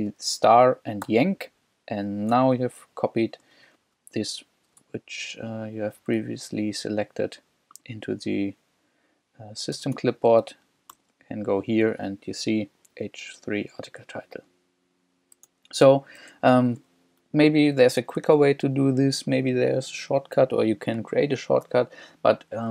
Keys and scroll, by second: 1.0 shift+y, 2.3 super+Tab, 3.5 shift+super+Tab, 4.8 super+Tab, 9.7 Return, 10.5 super+Return, 11.0 super+v, 15.5 super+Tab, 17.0 j, 18.2 k.